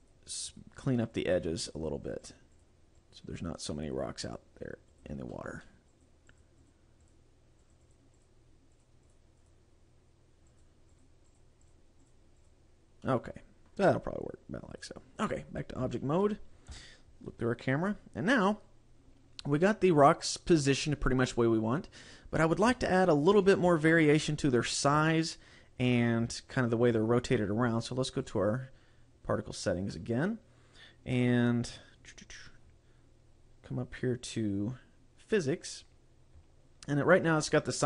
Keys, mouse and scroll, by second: 0.1 click, 0.7 click, 1.3 click, 2.0 click, 2.3 click, 2.7 click, 3.1 click, 3.7 click, 4.4 click, 5.1 click, 5.4 shift+middle click, 6.1 click, 6.5 click, 6.9 click, 7.3 click, 7.7 click, 8.0 click, 8.3 click, 8.9 click, 9.2 click, 9.5 click, 10.7 click, 11.1 click, 11.5 click, 11.8 click, 12.1 click, 12.5 click, 13.1 middle click, 15.5 click, 15.7 scroll down 1, 16.0 shift+middle click, 16.9 KP_0, 17.5-18.1 scroll up 2, 18.7 scroll down 1, 22.8 shift+middle click, 23.9 shift+middle click, 25.2 shift+middle click, 26.7 shift+middle click, 28.3 click, 33.0-35.4 scroll up 7, 35.4-36.5 scroll up 3.